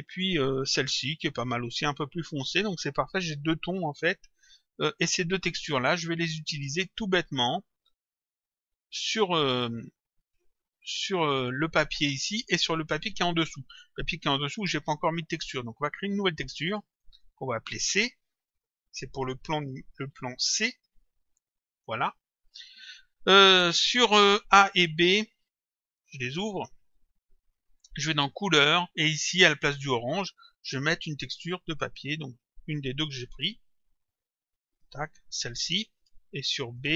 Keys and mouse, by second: 0.4 click, 5.6 click, 6.8 click, 16.9 click, 18.5 click, 20.1 shift+c, 20.5 click, 25.9 click, 28.3 click, 31.7 click, 34.7 click, 36.7 click.